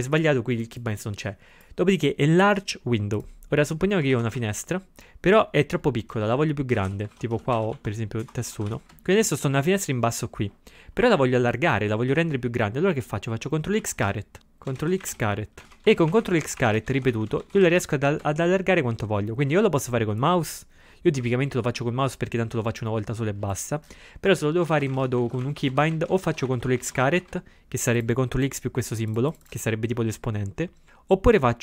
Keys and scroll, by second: 4.1 ctrl+x, 4.3 2, 6.8-8.1 typing, 13.8 ctrl+x, 14.1 ctrl+=, 24.7 ctrl+x, 25.0 shift+6.